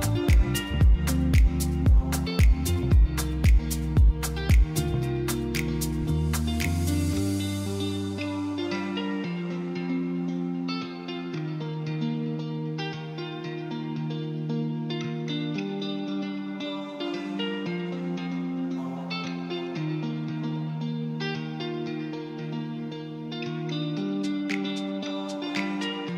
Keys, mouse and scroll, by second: 2.4 click, 2.7 middle click, 5.5 click, 5.8 middle click, 7.2 shift+click, 8.3 shift+click, 9.0 shift+click, 10.0 KP_7, 11.1 KP_3, 12.3 shift+d, 12.7 z, 13.7 click, 14.1 s, 15.3 click, 15.7-17.3 middle drag, 18.9 KP_7, 20.3 r, 20.8 z, 22.5 click, 23.0 middle click, 25.2 z.